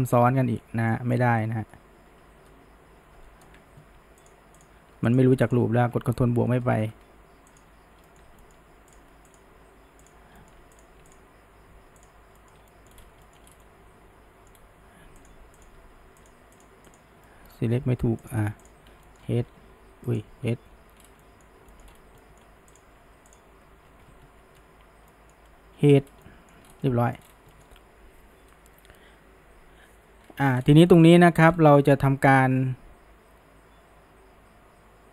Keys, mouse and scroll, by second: 0.2-0.5 scroll up 1, 0.9-1.8 middle drag, 1.8 ctrl+KP_Add, 4.3 shift+drag, 4.6 shift+click, 5.1 click, 5.5 shift+click, 6.4 ctrl+KP_Add, 7.5 shift+click, 8.1-9.0 shift+middle drag, 9.3 shift+click, 10.1 shift+click, 10.4-10.8 shift+middle drag, 10.8 click, 11.1 shift+drag, 12.0 shift+click, 12.4-13.0 shift+middle drag, 13.0 scroll up 1, 13.3 shift+middle drag, 13.5 scroll down 1, 13.6-14.6 middle drag, 14.6-15.2 scroll up 1, 15.2 click, 15.6 click, 16.2 click, 16.6 click, 16.9 click, 17.3-18.3 middle drag, 18.3 shift+drag, 18.7 shift+drag, 19.1 middle click, 19.5 g, 20.7 h, 21.1 scroll down 1, 21.2-21.9 middle drag, 22.2-22.8 middle drag, 22.8 click, 24.5 ctrl+KP_Add, 25.1 middle click, 25.8 h, 26.1 scroll down 1, 26.3 middle click, 26.7 scroll, 26.9 middle click, 27.2 scroll, 27.5-30.2 shift+middle drag, 30.9-31.5 shift+middle drag, 31.8-35.1 shift+middle drag.